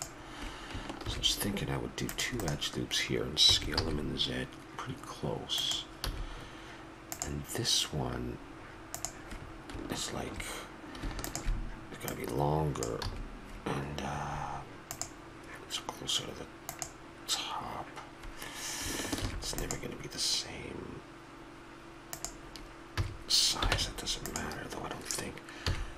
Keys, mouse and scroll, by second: 1.0 ctrl+r, 3.5 s, 6.0 a, 9.0 a, 11.2-13.8 drag, 13.0 a, 13.9-15.0 middle drag, 19.2 ctrl+r, 23.0 a, 23.7 ctrl+Tab, 25.6 KP_3.